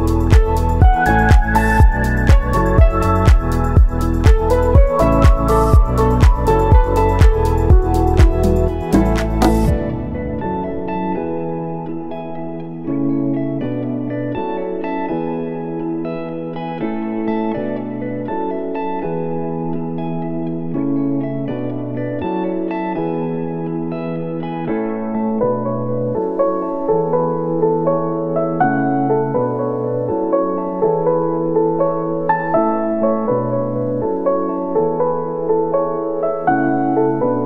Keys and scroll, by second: 1.3 space, 37.3 space.